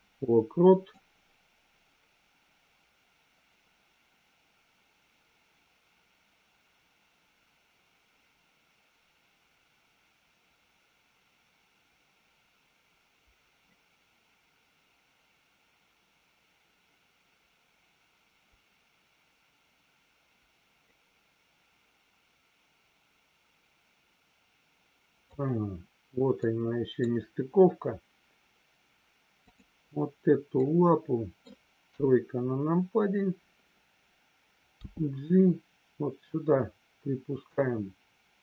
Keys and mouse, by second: 0.9-25.3 drag, 26.4-26.9 middle drag, 30.6-31.4 middle drag, 31.8 KP_3, 34.8 g.